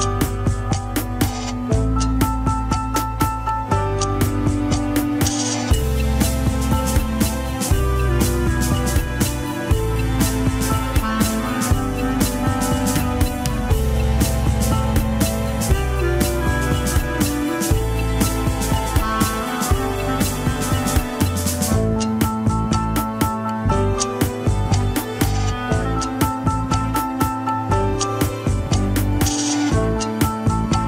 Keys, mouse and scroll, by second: 0.0 scroll up 2, 0.2 shift+middle click, 1.0 click, 1.6-2.1 middle drag, 2.1-2.7 drag, 2.7-4.7 drag, 5.6 click, 6.0 click, 6.7 click, 7.0 click, 7.8 ctrl+s, 8.1 alt+z, 8.4-8.7 shift+middle drag, 8.7 alt+z, 9.2 scroll up 1, 9.6 click, 9.9 alt+z, 19.3 scroll up 2, 19.4 KP_3, 20.0 shift+click, 20.8 shift+h, 21.0-21.4 shift+middle drag, 21.4 click, 21.7 scroll up 1, 21.9 Tab, 22.1 alt+z, 22.9 click, 23.6 scroll down 1, 23.7 KP_1, 24.1 alt+z, 25.3 KP_3, 25.6 alt+z, 27.1-29.0 scroll up 2, 29.0-29.3 scroll down 1, 29.3 h, 29.8 alt+z, 30.0 alt+z, 30.4 click.